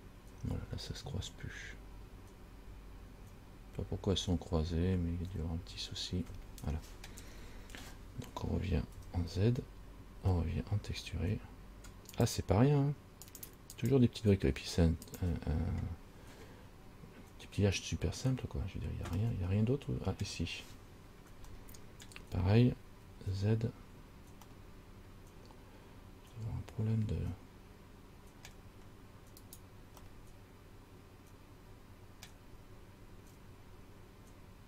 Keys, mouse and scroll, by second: 7.6 scroll down 3, 9.2 z, 12.3 click, 14.0 click, 14.7 click, 19.4 middle click, 21.8 shift+middle click, 23.2 z, 24.1-24.6 scroll up 1, 24.7 middle click, 29.7 right click, 30.3 middle click, 33.5 z.